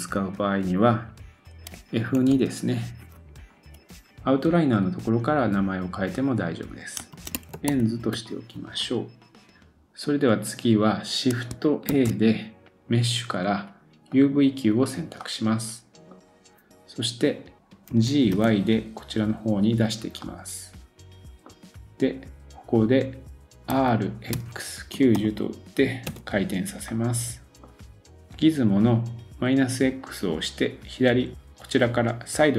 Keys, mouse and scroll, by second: 9.5 middle click, 11.9 shift+a, 15.0-17.9 drag, 15.2 middle click, 17.9 g, 20.2 middle click, 26.9 middle click, 27.9 click, 27.9 scroll up 3.